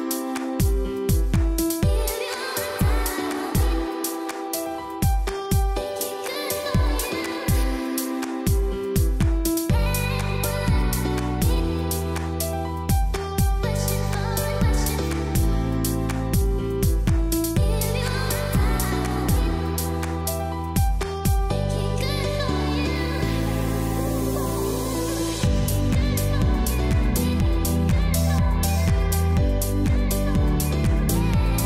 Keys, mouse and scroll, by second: 0.0-0.5 typing, 0.4 click, 1.0 click, 3.3-5.7 typing, 3.8 click, 5.3 click, 7.6 z, 7.9 click, 14.2 ctrl+e, 14.7 click, 17.3 z, 17.8 click, 21.4 ctrl+j, 21.9 ctrl+shift+a, 26.2 click, 26.6 space, 26.8 click, 27.3 space, 27.6 click, 27.7 space, 27.9 click, 28.2 space, 30.6 j, 31.0 click.